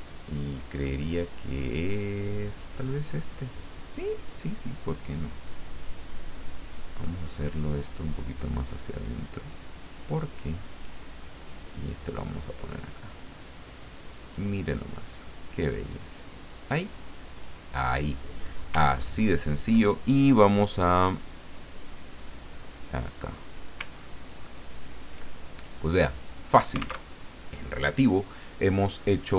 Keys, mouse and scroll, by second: 0.3-0.9 scroll down 1, 1.5-2.1 scroll down 2, 2.8 click, 5.5 click, 7.0-9.2 drag, 9.8-11.5 drag, 12.0-14.5 drag, 15.0-16.5 drag, 18.3 click, 18.9-19.7 ctrl+scroll up 4, 21.6-23.9 drag, 23.9-24.6 ctrl+scroll down 4, 26.1 click, 27.0 alt+Tab.